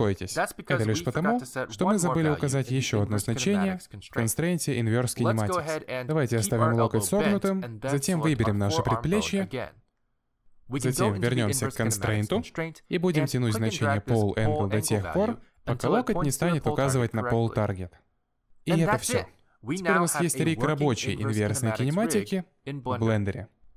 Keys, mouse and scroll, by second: 2.4 click, 2.9 middle click, 3.6-4.1 scroll up 3, 4.1 shift+middle click, 4.4 middle click, 6.1 middle click, 7.0 click, 7.4 g, 8.3 click, 10.1 middle click, 13.2 click, 16.3 middle click, 17.1 click, 17.4 middle click, 18.1 g, 18.8 middle click, 19.2 g, 19.8 middle click, 20.1 g, 20.5 middle click, 20.8 g, 21.4 middle click, 21.8 click, 21.9 middle click, 22.1 g, 23.0 click, 23.1 scroll down 3, 23.2 middle click, 23.4 g.